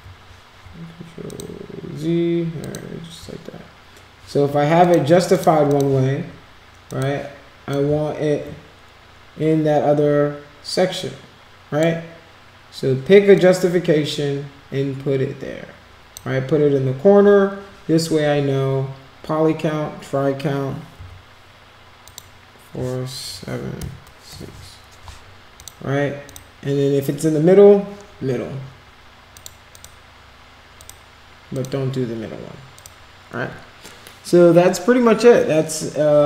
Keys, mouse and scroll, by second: 1.2 click, 2.6 click, 4.8 click, 5.3 click, 5.7 click, 6.8 click, 7.7-11.8 shift+drag, 13.3 click, 22.0 click, 25.5 click, 26.2 click, 29.3 click, 29.7 click, 30.7 click, 31.5 click, 32.8 click.